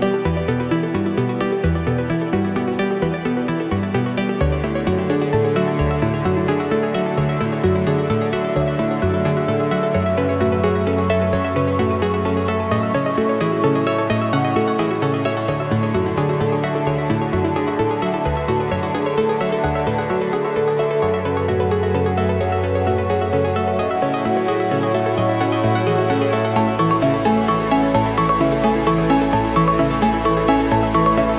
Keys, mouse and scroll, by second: 0.8 click, 1.8 click, 2.2 space, 2.7 click, 5.2 click, 6.4 ctrl+click, 7.7 click, 8.3-9.7 drag, 11.9 click, 12.3 space, 13.1 click, 13.7-16.7 drag, 17.0 0, 18.0 click, 19.4 click, 20.2 click, 20.9-21.2 scroll down 1, 22.4 click, 23.4 8, 23.8 0, 24.7 scroll down 1, 25.3 scroll up 2, 26.5 click, 27.5 8, 27.8 0, 29.0 click, 30.4 3, 30.9 0.